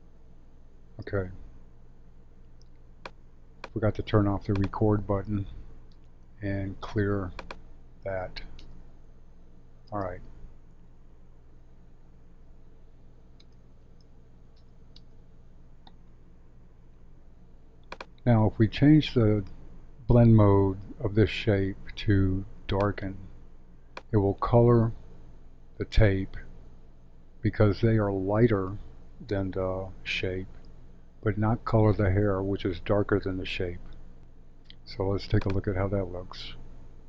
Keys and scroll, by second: 0.9 space, 8.5 space, 9.8 space, 13.4 space.